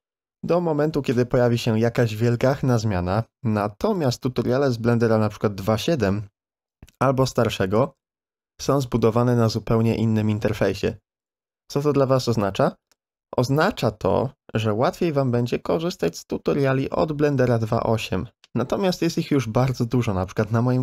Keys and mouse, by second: 13.0 Tab, 15.4 z, 18.3 shift+middle click.